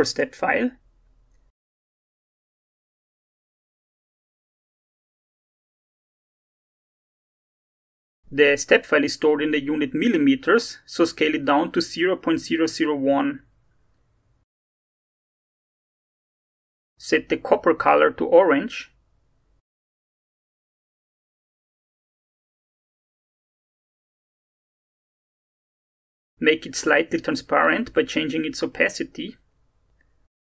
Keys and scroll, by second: 9.3-11.5 typing, 10.1 Tab, 10.9 Tab, 11.6 Return, 28.3 0, 28.5 ., 28.6 5, 28.7 Return.